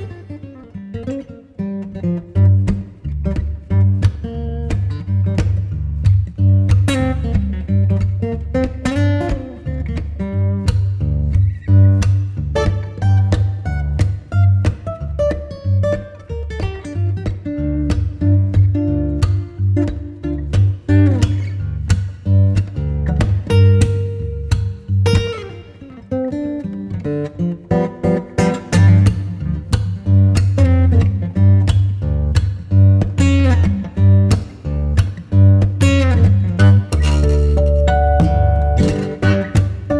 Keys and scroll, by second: 2.6 b, 21.0 v.